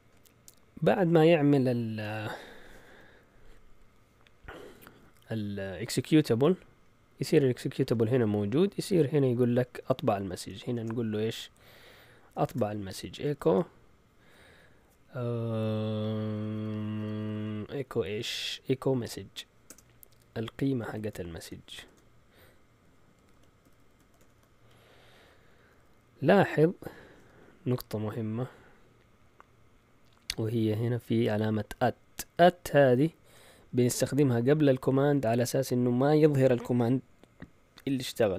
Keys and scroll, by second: 2.2 Up, 2.8 Down, 8.3 Up, 8.8 Up, 9.6 Up, 10.7 Return, 12.2-13.8 typing, 19.2 m, 19.7 BackSpace, 20.8-21.8 typing, 22.9-24.7 typing.